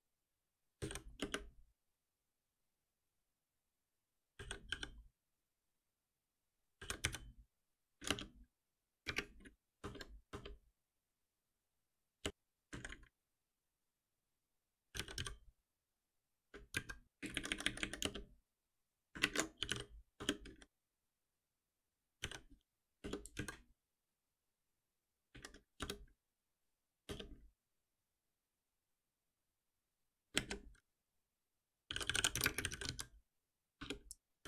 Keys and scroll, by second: 1.2 Return, 5.9 Return, 11.4 shift+Down, 13.7 ctrl+shift+Right, 16.4 Return, 18.0 Return, 19.2 ctrl+shift+Right, 20.1 Return, 23.0 Return.